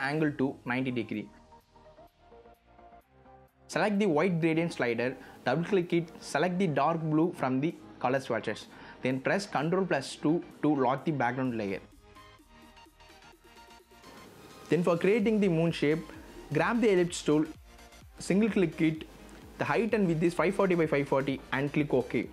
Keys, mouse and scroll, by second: 0.8 BackSpace, 0.9 KP_0, 1.0 click, 11.9 z, 12.1-16.7 drag, 20.4 BackSpace, 21.3 KP_5, 21.9 KP_4.